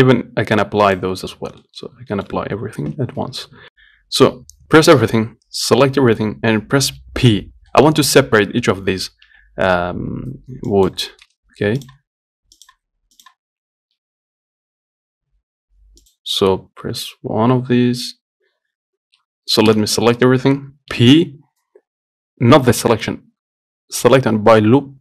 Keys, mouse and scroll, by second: 1.1 click, 1.9-3.2 middle drag, 3.2 scroll up 1, 3.4 middle click, 3.7 Tab, 5.2 a, 6.1-9.5 middle drag, 9.5 p, 11.8 Tab, 12.1 click, 12.9 click, 13.9 Tab, 14.2 Tab, 16.3 click, 17.1 l, 17.5 l, 19.9 a, 21.2 p.